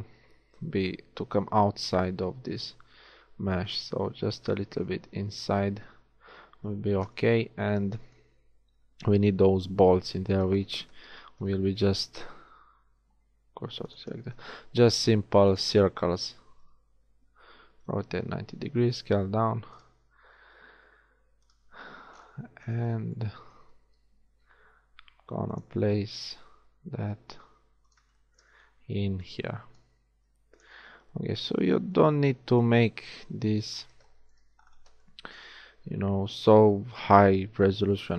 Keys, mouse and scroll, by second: 5.4 z, 6.3 z, 7.1 KP_1, 8.7 z, 11.4 shift+a, 12.7 shift+s, 14.4 shift+a, 17.1 r, 18.9 s, 20.3 s, 24.3 g, 26.0 s, 30.3 shift+s, 31.0 z, 33.7 click, 34.1 click.